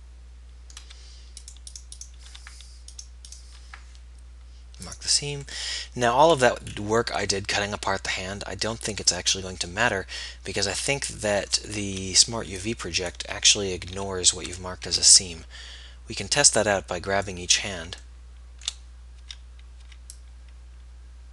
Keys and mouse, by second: 6.0-7.0 drag, 7.0-11.2 middle drag, 12.1-15.0 typing, 13.2-15.0 drag, 19.4 b, 20.0 b.